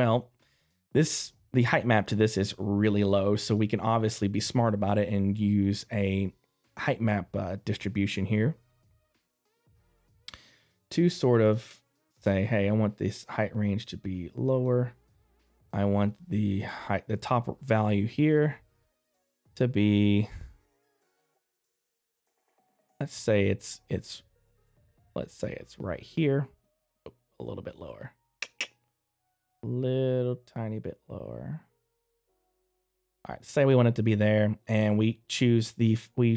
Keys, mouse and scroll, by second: 10.8 middle click, 10.8 click, 12.7 click, 33.4 middle click, 35.6 click.